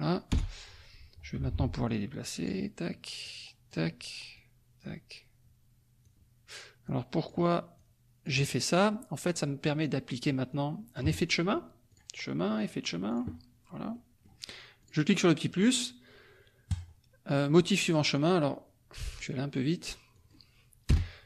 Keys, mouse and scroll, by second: 0.3 Return, 1.3 F2, 1.8 click, 3.2 click, 3.4-4.1 scroll down 1, 4.3 click, 6.0 click, 6.8 click, 7.7 click, 9.6 click, 10.5 click, 11.9 click, 13.1 click, 13.9 click, 14.8 click, 16.7 click, 18.1 click, 19.2 click, 20.1 click, 20.9 BackSpace.